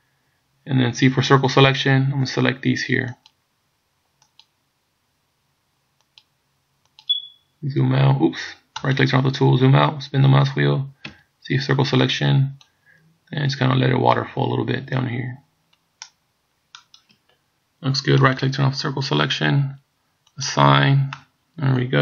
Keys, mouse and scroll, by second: 1.0 c, 9.0 right click, 9.4-9.8 scroll down 2, 11.1 c, 18.5 right click, 20.4 click, 21.2 middle click.